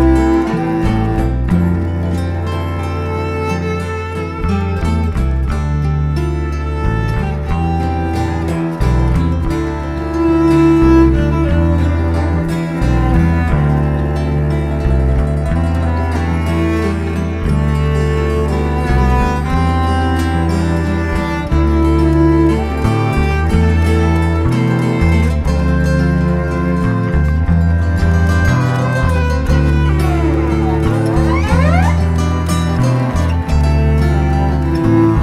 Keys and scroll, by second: 11.8 2, 12.1 Return, 16.2 3, 16.8 Return, 21.9 5, 22.3 Return, 26.2 6, 26.6 Return.